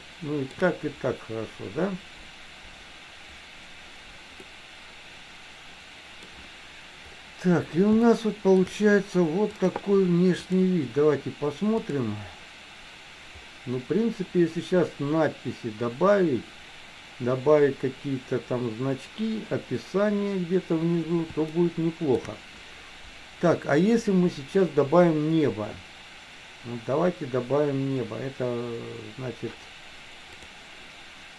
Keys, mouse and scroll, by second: 0.2 shift+middle click, 4.5-6.4 middle drag, 8.2 shift+middle click, 9.6 click, 10.5 click, 11.8 click, 21.6 shift+middle click.